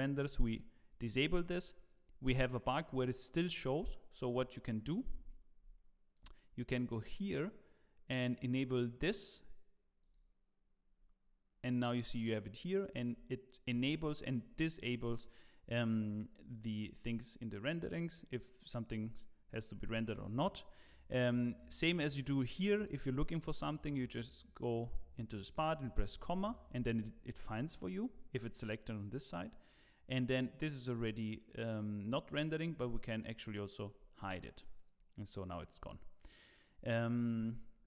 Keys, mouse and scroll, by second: 8.8 click, 32.7 click.